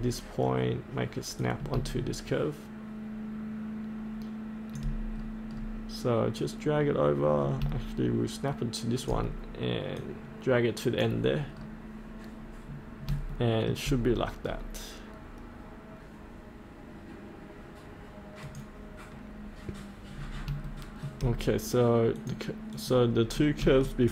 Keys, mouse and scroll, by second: 1.4 click, 4.7 click, 6.3-11.5 drag, 11.5 scroll up 1, 13.3 shift+middle click, 14.1-18.4 scroll down 1, 18.4 click, 19.3-20.1 scroll up 1, 20.7 shift+middle click, 22.1 click, 23.2-23.6 scroll up 1, 23.8 shift+middle click.